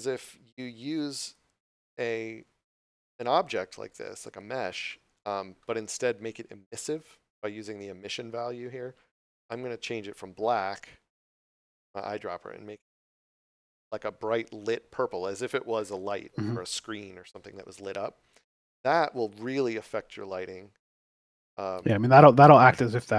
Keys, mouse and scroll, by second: 1.7 right click, 9.3 click, 19.4 click.